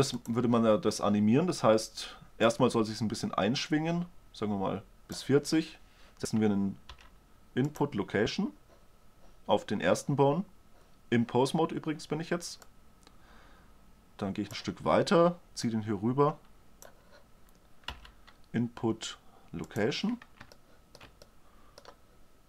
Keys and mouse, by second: 0.7-2.6 drag, 2.9-4.8 drag, 7.5 i, 13.2 drag, 16.2-17.9 drag, 18.4 i.